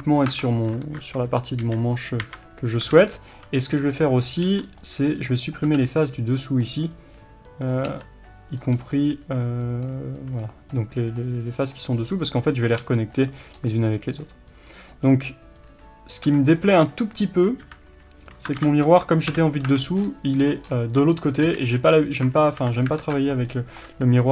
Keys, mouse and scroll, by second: 0.3 Tab, 0.8 KP_3, 2.9 alt+a, 3.1-3.4 scroll up 1, 4.4 3, 4.9 click, 6.3 x, 6.7-8.5 middle drag, 8.5 click, 8.9-13.2 middle drag, 10.0 2, 12.8 3, 13.2 click, 13.5 scroll up 1, 13.9-14.8 middle drag, 14.8 click, 15.1 scroll down 1, 15.7 1, 16.2 Tab, 16.6-24.3 middle drag, 17.6 KP_7, 18.6 ctrl+KP_7, 19.3 KP_7, 19.6 Tab, 20.0-20.3 scroll down 2, 20.3 a, 20.6-21.4 scroll up 2, 21.4 KP_1, 23.0 alt+z, 23.5-24.3 scroll down 2.